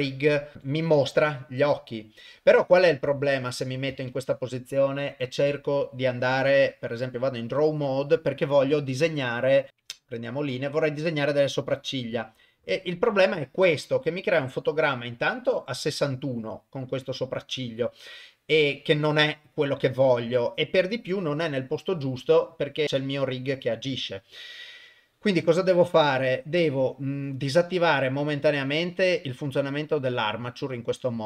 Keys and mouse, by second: 0.5 Left, 0.5 Right, 3.1-3.6 shift+middle drag, 4.1 ctrl+Tab, 9.7-10.9 drag, 11.4 click, 22.8 ctrl+z, 26.7 click, 28.6 click.